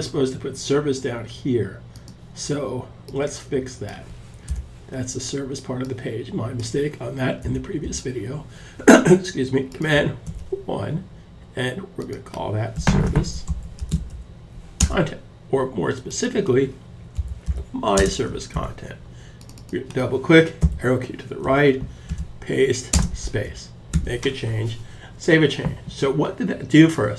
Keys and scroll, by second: 9.6 super+1, 11.9-14.1 typing, 16.1-17.4 typing, 17.9 super+s, 20.1 Left, 21.5 super+v, 22.4-23.5 typing.